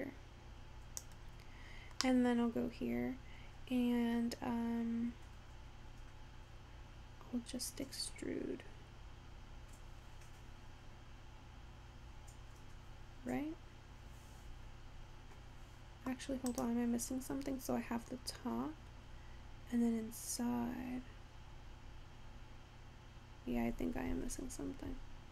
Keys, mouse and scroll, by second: 2.1 scroll down 1, 2.4-5.2 middle drag, 16.6 click.